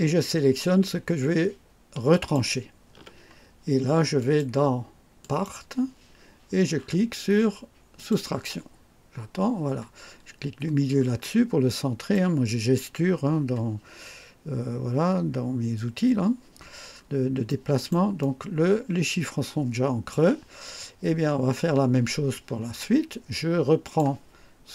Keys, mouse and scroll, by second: 2.0 ctrl+click, 4.1 click, 5.1 click, 7.9 click, 10.6 middle click, 11.1 click, 16.9-17.3 scroll up 1, 17.4 right click, 18.1-20.3 drag, 22.7-23.1 scroll down 1, 23.8 click.